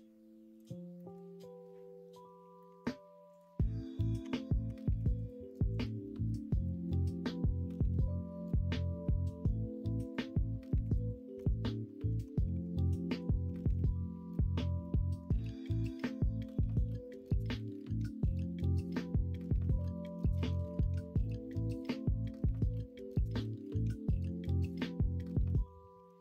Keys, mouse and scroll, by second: 0.9 middle click, 2.6 middle click, 3.9 middle click, 4.2 Tab, 4.7 Tab, 6.6 middle click, 11.4 Tab, 11.9 middle click, 12.6 1, 13.6 alt+z, 14.8 middle click, 15.6-17.1 middle drag, 17.3 middle click, 19.9 middle click, 20.8 middle click, 22.5 shift+s, 24.1 middle click, 24.5 alt+z, 25.3 Tab, 25.5 middle click, 25.9 shift+a.